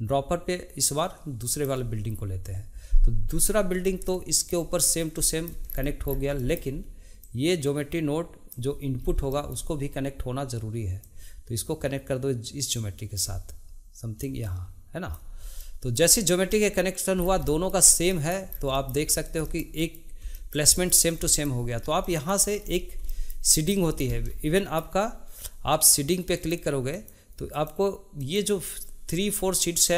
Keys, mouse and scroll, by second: 4.1-5.7 shift+middle drag, 5.7-6.4 scroll down 2, 6.4-7.2 shift+middle drag, 7.2 click, 9.1 scroll up 1, 9.3-11.0 shift+middle drag, 11.0-14.0 drag, 14.3-15.6 drag, 15.6-17.2 shift+middle drag, 17.2 scroll down 1, 17.4-18.5 shift+middle drag, 18.5 scroll down 2, 18.7 shift+middle click, 19.1 scroll up 2, 19.4-22.6 shift+middle drag, 22.6 scroll up 3, 23.1-25.7 shift+middle drag, 25.7-29.9 drag.